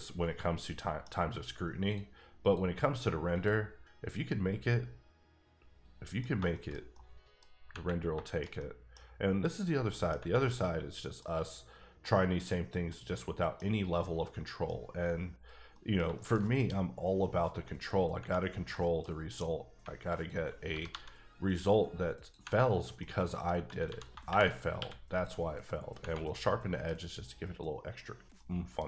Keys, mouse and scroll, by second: 1.8 click, 2.4 click, 3.3 click, 3.9-4.3 scroll down 2, 4.3 middle click, 6.3 scroll down 2, 6.5 shift+middle click, 7.2 middle click, 7.4 scroll up 3, 8.0 scroll down 2, 8.2 shift+middle click, 9.9 middle click, 10.4 middle click, 12.0 middle click, 13.0 middle click, 14.0 scroll down 1, 14.2 middle click, 15.7 middle click, 16.1 shift+middle click, 16.4 shift+double middle click, 17.6 middle click, 18.8 middle click, 19.1-19.8 scroll up 2, 20.1 alt+click, 20.7 g, 20.9 g, 22.1 click, 22.7 scroll down 1, 23.0 middle click, 23.9 a, 24.8 q, 25.1 click, 25.7 middle click, 26.2 middle click, 27.1-28.1 scroll up 1, 28.1 scroll down 1, 28.4 middle click.